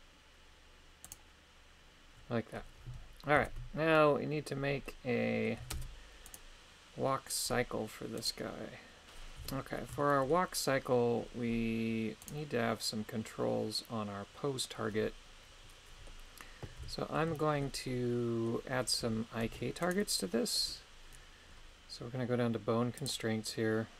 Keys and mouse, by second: 1.1 right click, 3.4 KP_3, 4.9 middle click, 5.8 shift+space, 6.3 right click, 8.3 right click, 9.4 KP_3, 10.0 shift+middle click, 12.2 right click, 12.7-16.2 middle drag, 16.8 KP_3, 17.4 shift+middle click, 17.9 middle click, 19.4 ctrl+Tab, 19.8 right click, 20.3 middle click.